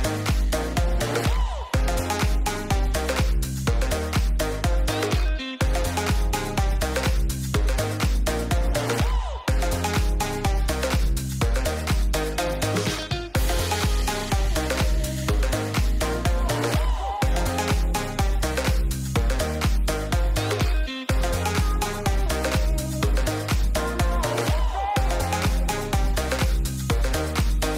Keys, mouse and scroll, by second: 0.3 click, 2.2-4.4 drag, 5.6 middle click, 15.8 middle click, 20.2-20.5 middle drag, 20.9 shift+middle click, 23.2 shift+d, 24.4 r, 26.4-26.9 middle drag.